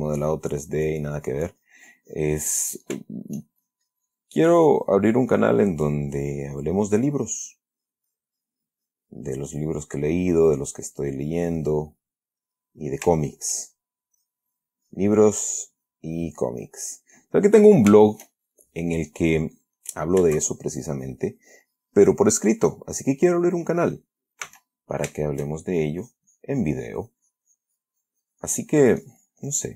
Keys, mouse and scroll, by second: 3.4-3.8 shift+middle drag, 3.9-7.4 shift+drag, 8.1-11.3 drag, 11.5-12.6 drag, 13.5-14.0 shift+middle drag, 14.5-16.0 drag, 16.1-18.2 drag, 18.4 shift+middle click, 18.9-20.3 shift+drag, 20.8-23.5 shift+drag, 24.8 s, 25.5 shift+middle click, 26.0-29.7 shift+drag.